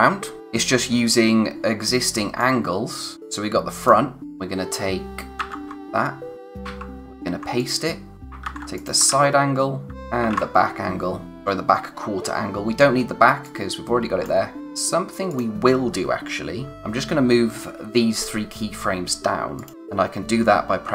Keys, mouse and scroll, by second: 0.4 click, 2.4 click, 5.4 ctrl+c, 5.7 click, 7.6 click, 8.4 ctrl+c, 8.8 click, 9.1 ctrl+v, 9.9 c, 9.9 click, 10.3 ctrl+v, 13.4 click, 19.6 click.